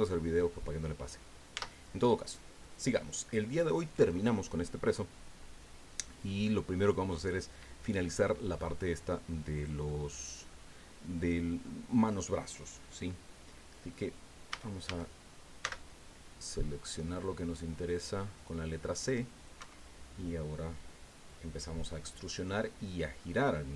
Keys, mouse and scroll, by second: 1.6 Tab, 2.6-3.7 drag, 3.7 middle click, 4.1-4.5 scroll up 1, 4.5 middle click, 4.7 scroll down 1, 4.9-9.6 middle drag, 9.6 click, 10.6 middle click, 10.8 scroll up 1, 11.0-14.5 middle drag, 14.5 a, 15.6 c, 16.6 scroll up 2, 17.2-19.6 drag, 19.6 Escape, 21.9-23.4 drag.